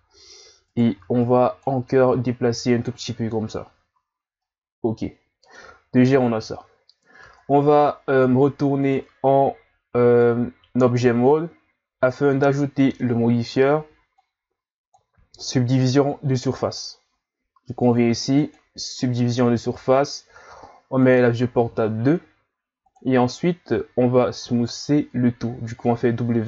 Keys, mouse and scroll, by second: 0.7 right click, 0.9 b, 2.1 click, 3.9 z, 4.2 scroll down 2, 4.4-7.3 middle drag, 7.3 Tab, 8.8 click, 14.2-19.6 drag, 21.0 click, 24.4 w.